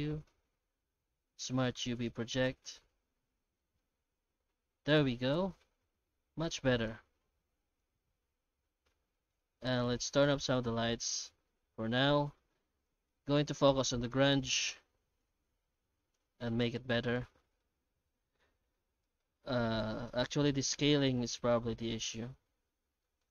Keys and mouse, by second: 3.6-4.0 middle drag, 4.9-6.9 middle drag, 7.2 shift+middle drag, 7.7 middle click, 10.1-12.8 drag, 13.2 middle click, 15.3 click, 16.6 shift+middle click, 17.6 middle click, 19.0 middle click, 20.1 middle click, 21.4 middle click, 22.1 middle click, 23.0 middle click.